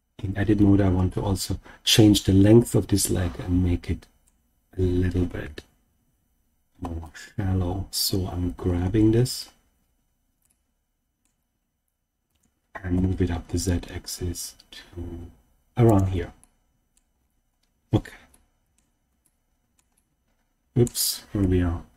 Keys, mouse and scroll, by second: 1.0-4.2 middle drag, 5.3 KP_1, 8.7-9.3 scroll up 2, 9.3 scroll up 1, 10.4 shift+middle click, 12.2 g, 12.9 z, 15.8 click, 16.3 middle click, 17.1-18.3 scroll down 3, 18.3 shift+middle click, 19.2 shift+middle click, 19.9 scroll up 1, 19.9 middle click, 21.3 KP_1.